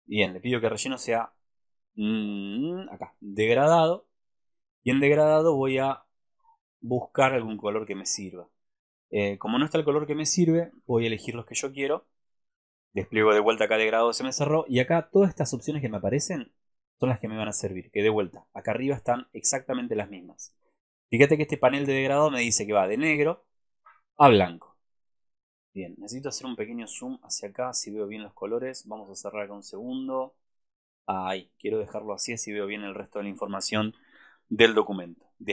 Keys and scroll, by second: 10.8 super+-, 27.0 alt+space.